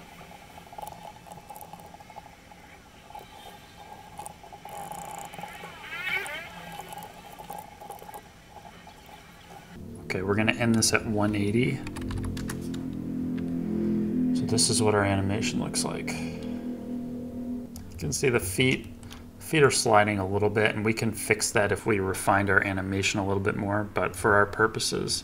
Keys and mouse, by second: 1.0 ctrl+Tab, 1.3 ctrl+Tab, 1.9-3.1 drag, 3.1 middle click, 3.3 space, 3.5 space, 4.3 alt+h, 4.7-5.2 ctrl+z, 5.6 Delete, 6.3 alt+h, 6.9 ctrl+c, 6.9 ctrl+v, 7.0 space, 7.3 space, 7.5 ctrl+v, 8.0 space, 8.1 shift+Left, 9.1 space, 10.7-12.2 drag, 12.9 middle click, 14.3-15.7 middle drag, 18.8 shift+middle drag, 22.1-24.1 drag.